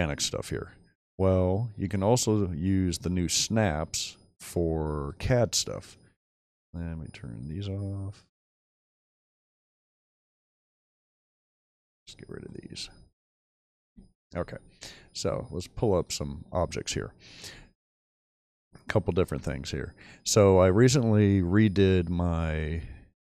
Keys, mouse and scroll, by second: 0.4-1.2 shift+middle drag, 13.8 Delete, 16.9-17.5 middle drag, 17.9 shift+middle drag, 18.5-19.9 shift+scroll up 2, 19.9 shift+middle click.